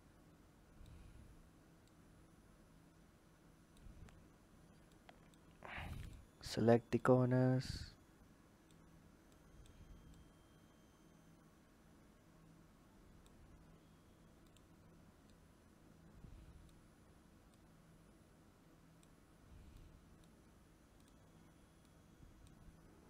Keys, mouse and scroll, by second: 1.6 click, 4.8-5.9 drag, 6.7 click, 9.1 click, 9.9 click, 14.2 click, 15.1 click, 17.3 click, 19.5 click, 20.8 click, 21.7 click, 22.9 click.